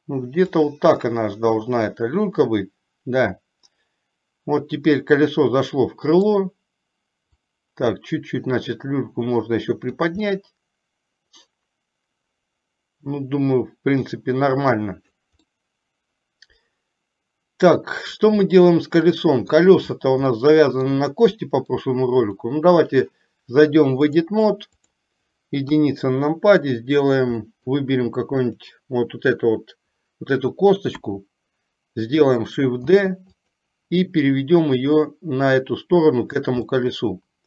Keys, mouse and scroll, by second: 1.1-6.6 middle drag, 7.4 click, 7.9-10.1 drag, 10.6-14.9 middle drag, 15.6 scroll up 1, 15.7-18.4 middle drag, 18.7 scroll up 1, 18.8-19.8 middle drag, 20.6 middle click, 21.7 middle click, 22.3 click, 24.2-25.2 drag, 25.9 KP_1, 27.6 middle click, 28.7 click, 31.1 KP_1, 33.1 shift+d, 34.8-36.6 drag, 36.8 scroll up 1, 37.1-37.4 middle drag.